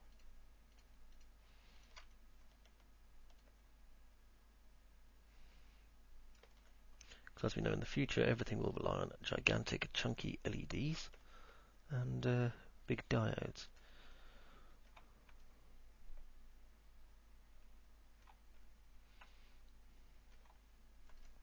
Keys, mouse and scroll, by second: 0.3 ctrl+click, 0.9 ctrl+click, 1.3 ctrl+click, 1.9 ctrl+click, 3.8-6.4 shift+drag, 9.4-11.1 shift+drag, 14.3 alt+middle click, 15.8-18.4 alt+middle drag, 15.8-16.3 alt+scroll up 1, 19.4-20.4 alt+middle drag.